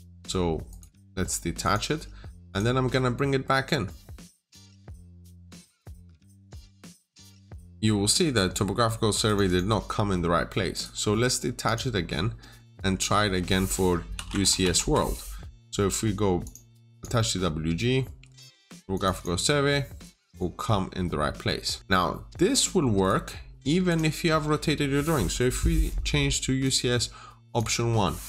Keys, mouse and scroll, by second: 0.5 right click, 1.5 click, 5.3 double click, 6.4 click, 7.3 middle click, 8.3 scroll down 1, 8.4 middle click, 8.8 scroll up 1, 9.1 click, 9.3 double click, 10.6 right click, 11.5 click, 12.0 scroll down 1, 12.3 middle click, 14.0-14.5 typing, 14.3 Return, 14.6 Return, 16.3 click, 19.0 double click, 20.1 click, 20.9-21.4 scroll up 1, 21.4 middle click, 21.8-22.9 scroll down 1, 22.9 right click, 23.7 click.